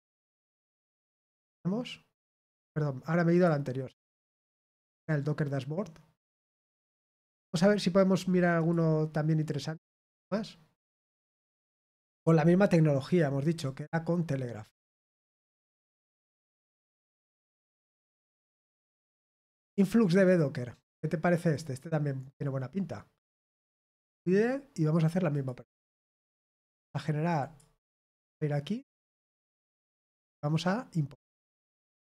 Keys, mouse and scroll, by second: 0.9 click, 3.3 click, 4.8 click, 7.0 click, 8.5 click, 10.1 click, 13.6 click, 15.2 click, 16.1 click, 21.5 click, 23.9 click, 25.3 click, 27.3 click.